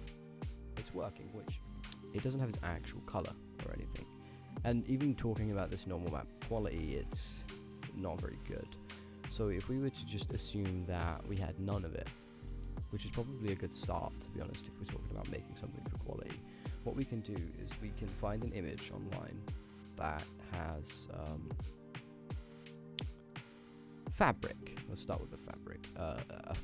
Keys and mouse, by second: 0.9 shift+click, 1.5 g, 2.4 middle click, 3.2 click, 3.3 g, 4.1 middle click, 5.3 click, 5.5 g, 8.9 click, 9.9 click, 11.2-11.9 drag, 12.1 x, 12.5 middle click, 14.1 middle click, 15.0 shift+a, 20.7-22.4 drag, 23.1 middle drag, 25.0 click, 25.4 middle click, 25.7 g, 26.2 middle click, 26.5 g.